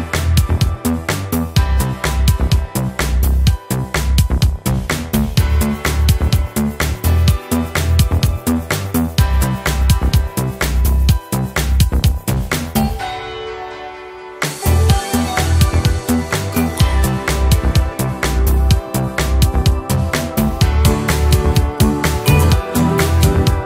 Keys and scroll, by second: 0.7 Escape, 1.2 F2, 2.0 Escape, 2.2 alt+7, 2.4 alt+a, 3.8 Return, 4.6 Escape, 6.9 F1, 7.1 Return, 7.2 Escape, 11.0 Return, 11.6 Escape, 14.3 Return, 14.9 Escape, 16.9 Return, 17.1 Escape, 19.0 Return, 19.7 Escape, 19.9 ctrl+d, 21.9 Return, 23.4 Escape.